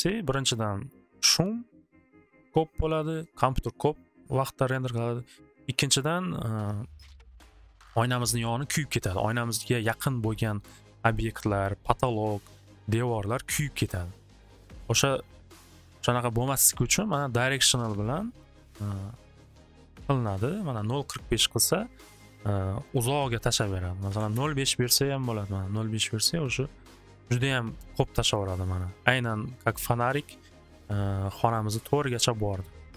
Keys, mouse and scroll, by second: 18.7 click, 19.3 right click, 20.0 click, 20.5 click, 24.0 5, 24.2-25.6 drag, 24.3-25.6 Return.